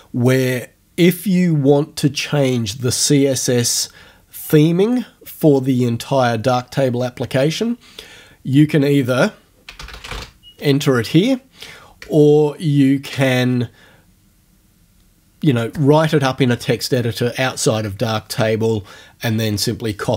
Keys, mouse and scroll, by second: 8.5 click, 9.8 j, 12.1 BackSpace.